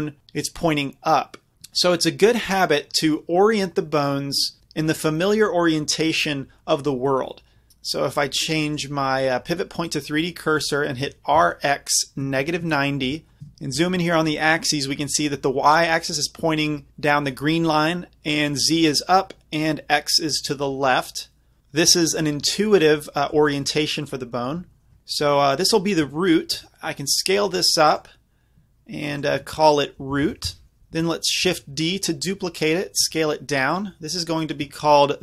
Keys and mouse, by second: 2.8-4.3 middle drag, 8.7-11.0 drag, 11.0 r, 13.4 KP_Decimal, 13.6 middle click, 13.8-14.2 middle drag, 14.2-14.6 middle drag, 14.7 middle click, 15.0 middle click, 22.9 middle click, 24.1 middle click, 24.3-25.6 drag, 25.6 middle click, 26.6 s, 28.0-30.8 drag, 30.3 o, 31.5 shift+d, 31.9 click, 33.1 s, 33.8-35.2 drag.